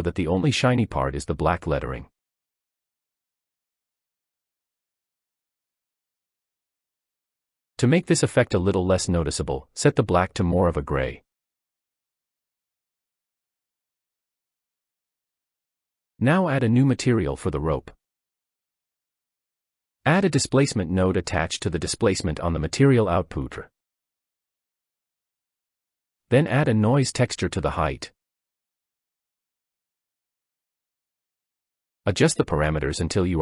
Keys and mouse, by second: 7.0-13.7 drag, 14.4-15.8 drag, 17.5 click, 18.5 click, 25.5-25.8 drag, 31.6-31.9 shift+drag.